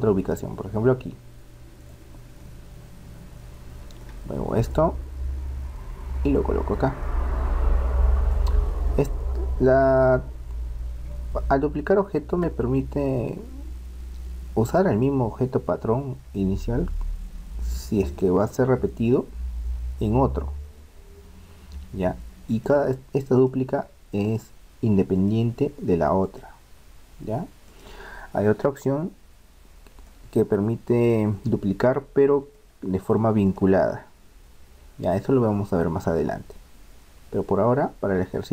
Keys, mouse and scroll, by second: 2.4-4.3 middle drag, 4.7-6.6 drag, 7.0-8.9 middle drag, 9.3-11.2 middle drag, 12.9-15.1 middle drag, 15.1-16.9 right drag, 19.1-20.9 right drag, 22.6-30.0 right drag, 30.0-31.9 middle drag, 33.4-35.4 right drag, 35.8-37.7 middle drag.